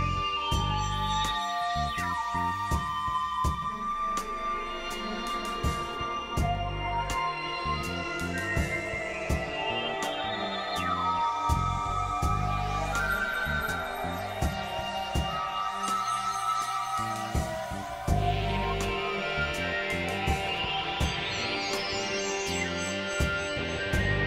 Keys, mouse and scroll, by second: 0.8 click, 3.0 click, 5.5 click, 6.3 click, 7.6-8.9 drag, 10.2 click, 11.0 click, 12.5 ctrl+z, 12.7 ctrl+z, 13.1 KP_1, 14.0 KP_3, 15.4 click, 16.6 KP_1, 16.8 KP_3, 17.4 z, 17.6 z, 17.9 click, 18.6-19.6 drag, 19.6 click, 19.8 z, 19.9 z, 23.7 middle click.